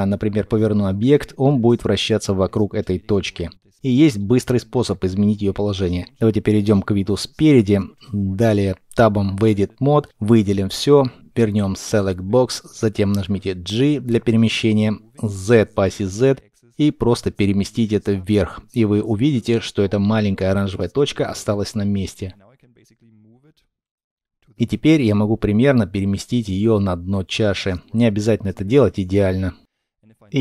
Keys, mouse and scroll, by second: 0.9 r, 4.0 right click, 7.5 middle click, 8.9 Tab, 10.1 a, 14.3 g, 15.6 z, 24.1-25.3 scroll up 1, 25.3 g, 25.5 z, 27.8-30.4 scroll down 1.